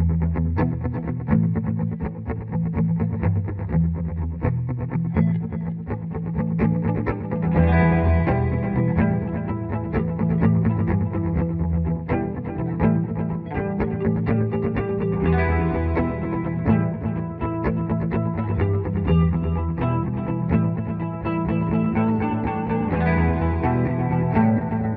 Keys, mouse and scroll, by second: 2.8 F3, 5.4-7.1 drag, 7.1 F4, 8.2 click, 9.0 shift+F2, 9.3 Escape, 9.9-14.0 drag, 14.3 click, 15.0 Escape, 15.7 click, 17.3 right click, 18.5 F12, 20.6 click.